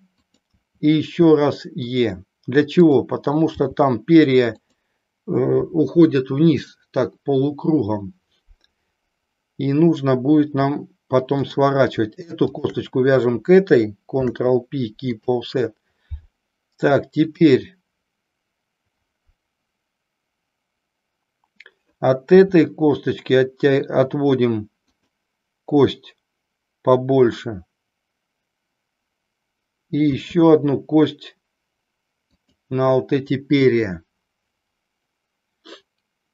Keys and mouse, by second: 0.3 click, 0.7 e, 2.8 click, 3.7 g, 11.4 click, 14.2 ctrl+p, 17.3 click, 32.4 click.